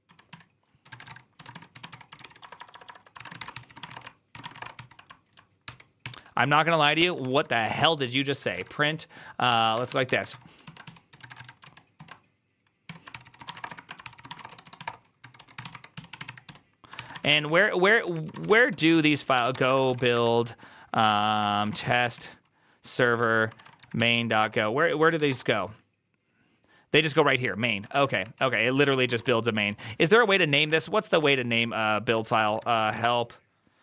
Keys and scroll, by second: 0.0-4.4 typing, 4.2 ctrl+c, 4.5 Return, 4.6 ctrl+t, 5.5 ctrl+h, 5.9 ctrl+n, 6.8 ctrl+s, 7.1 ctrl+c, 7.1-11.8 typing, 11.8 ctrl+y, 12.7 Tab, 13.0 ctrl+c, 13.1 ctrl+c, 13.1-25.5 typing, 20.9 ctrl+w, 21.0 ctrl+w, 27.6 ctrl+a, 27.8 1, 28.1 ctrl+c, 28.7 ctrl+c, 28.9 ctrl+:, 29.0-33.4 typing, 29.1 Return, 30.5 Up.